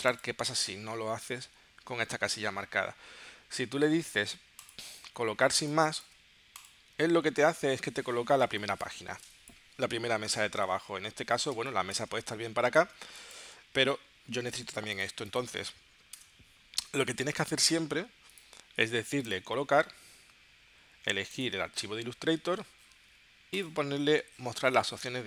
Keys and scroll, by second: 5.5 space, 8.6 space, 11.6 space, 13.0 space, 16.1 BackSpace.